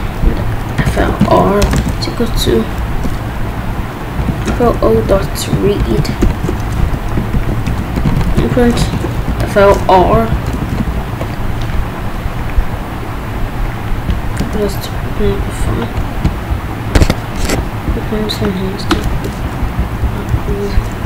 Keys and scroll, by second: 0.8 f, 1.6 space, 2.4 f, 2.9 BackSpace, 3.9-6.7 typing, 6.8 Right, 7.3 ctrl+s, 8.1-9.7 typing, 10.5 Return, 10.9 ctrl+b, 14.4 Return, 19.1 BackSpace, 19.5 Up, 20.3 Down, 20.4 Left.